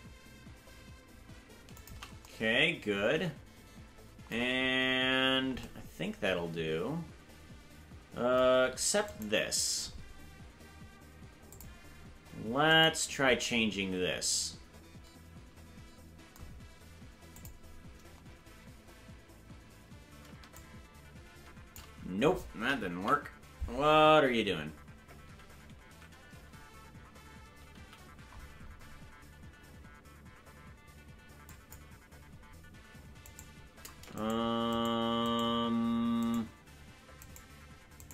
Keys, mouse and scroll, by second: 9.1-11.5 right drag, 11.5 click, 12.7 right click, 17.3 click, 20.5-21.7 shift+drag, 22.9 KP_Decimal, 24.2 scroll up 1, 25.2 ctrl+z, 27.8 c, 35.2-38.1 shift+right drag.